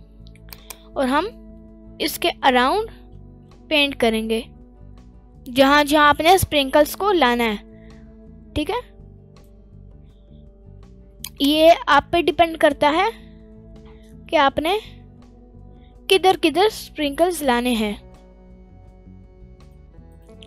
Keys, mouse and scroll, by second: 0.8 click, 11.6 click, 20.2 ctrl+z, 20.2 middle click.